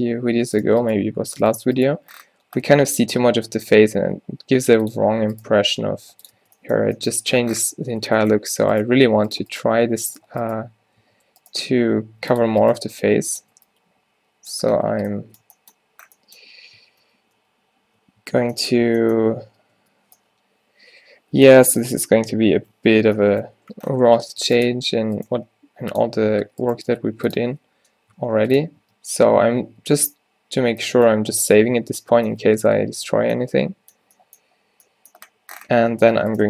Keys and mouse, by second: 1.0 g, 1.6-3.8 drag, 1.9 g, 5.4-6.7 drag, 5.6 g, 6.4 Tab, 6.8 click, 8.0 Tab, 8.5 Tab, 8.9 Tab, 9.1 click, 9.5 Tab, 9.7 Tab, 10.3 Tab, 11.1 Tab, 11.8 g, 12.8 g, 13.5 Tab, 14.8 a, 17.2 ctrl+z, 17.5 ctrl+z, 18.3 Tab, 18.8 Tab, 19.5 Tab, 19.8 Tab, 24.2 Tab, 24.4 Tab, 24.8 Tab, 25.4 g, 26.1 Tab, 26.5 Tab, 26.8 g, 27.4 Tab, 28.4 ctrl+s, 28.9 Tab, 29.7 Tab, 31.4 Tab, 31.9 Tab, 33.3 a, 35.9 Tab, 36.2 Tab.